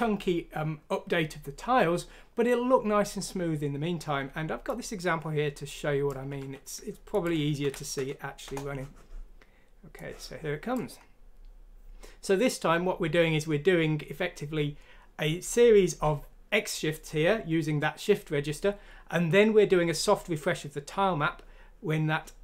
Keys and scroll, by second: 6.3 ctrl+q, 7.6 F6, 8.4 Return.